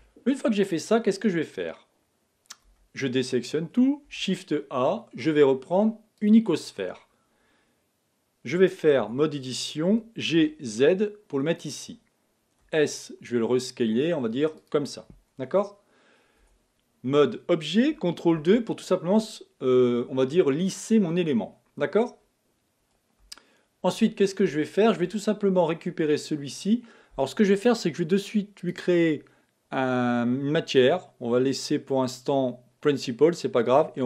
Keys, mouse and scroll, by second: 2.7 a, 4.1 shift+a, 9.0 Tab, 9.9 g, 12.6 s, 16.4 Tab, 18.4 ctrl+2, 23.4 shift+middle click, 24.2-24.6 scroll up 1, 24.6-27.6 shift+middle drag, 28.6 click, 30.7-33.7 drag.